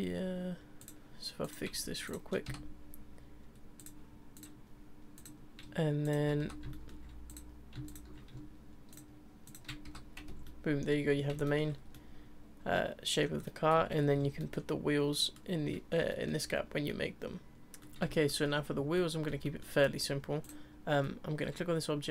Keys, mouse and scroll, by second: 0.8 click, 1.4 click, 2.0 shift+click, 2.5 f, 3.8 click, 4.3 click, 5.1 click, 6.0 shift+click, 6.4 f, 6.7-7.3 shift+middle drag, 7.3 click, 7.9 shift+click, 8.9 shift+click, 9.4 shift+click, 9.8 f, 10.2 Tab, 10.3 scroll down 1, 10.4-11.1 middle drag, 11.1 scroll down 3, 11.4 shift+middle drag, 11.7 scroll down 2, 11.9-13.4 middle drag, 13.4 scroll up 2, 13.4-14.2 middle drag, 14.2 scroll up 4, 14.4-15.4 middle drag, 15.4-16.1 scroll down 2, 16.1-17.6 shift+middle drag, 17.8 middle click, 17.8 scroll, 18.0-19.8 shift+middle drag, 19.8-20.2 scroll down 2, 20.4 click.